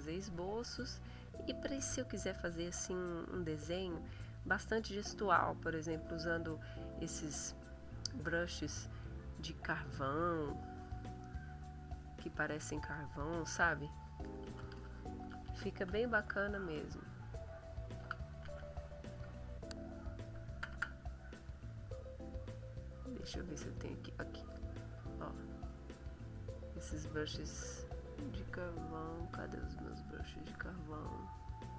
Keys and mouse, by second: 0.0 click, 2.1-3.4 drag, 3.5 click, 7.5-8.5 drag, 9.7 click, 10.5 click, 13.6 click, 14.2-16.3 typing, 18.0 o, 18.4 a, 19.3 BackSpace, 22.0-24.0 drag, 24.2 click, 25.0 click, 26.2 click, 26.8 click, 28.6 click, 28.9 click, 29.8 click, 31.6 click.